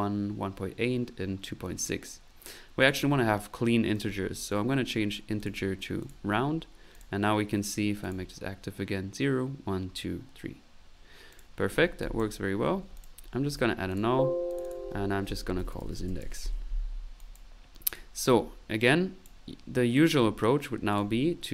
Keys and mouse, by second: 2.8 click, 3.9 click, 5.4 click, 6.0 click, 6.9 click, 6.9 typing, 8.0 click, 11.3 click, 11.7 middle click, 12.2 click, 12.9 click, 13.6 alt+n, 13.9 alt+click, 14.5 alt+click, 17.2 click, 17.9 click, 18.6 middle click, 18.9 click, 20.9 click.